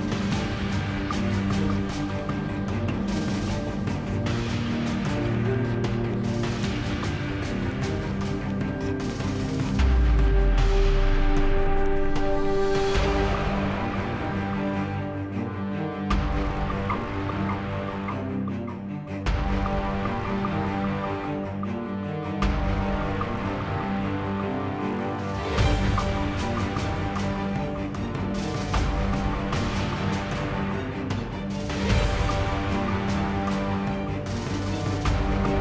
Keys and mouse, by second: 0.0-2.4 typing, 0.7 Tab, 2.1 Tab, 3.5-4.1 middle drag, 3.7 z, 4.3 ctrl+e, 4.6 ctrl+e, 5.2 z, 5.5 Tab, 5.8 KP_7, 5.8 z, 6.0 z, 6.2 Tab, 6.5 ctrl+z, 6.8 ctrl+b, 8.5 Tab, 9.2 Tab, 10.1-11.1 drag, 11.1 shift+e, 11.3 Tab, 12.0 Tab, 13.0 Tab, 13.1 KP_7, 13.4 z, 14.3 z, 14.4 Tab, 15.7 ctrl+Tab, 16.5-17.8 middle drag, 17.8 shift+e, 18.7 ctrl+b, 18.7 shift+e, 20.6 ctrl+z, 21.0 ctrl+b, 23.8 Tab, 24.0 Tab, 24.0 z, 24.6 shift+e, 24.7 Tab, 24.9 z, 25.9 Tab, 27.2 z, 27.5 z, 29.1 z, 29.2 KP_7, 30.0 z, 30.3 ctrl+b, 31.2 shift+e, 33.1 shift+e, 33.3 Tab, 34.2 Tab, 35.0 KP_Decimal, 35.5 shift+e.